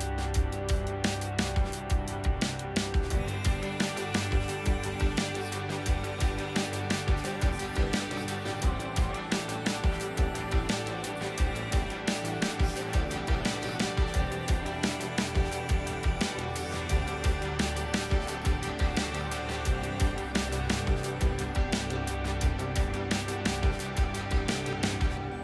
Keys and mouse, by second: 0.7 click, 2.7 ctrl+c, 3.4 click, 4.8 ctrl+v, 5.5 click, 6.9 click, 8.5 shift+middle click, 9.0 z, 9.9 ctrl+s, 10.8-11.6 drag, 12.5 ctrl+s, 12.8 z, 14.2-15.2 drag, 15.5 click, 17.9 click, 18.7 click, 19.4 ctrl+s, 20.5 click, 21.9 shift+click, 23.0 shift+click, 23.9 click, 24.8 click, 25.3 click.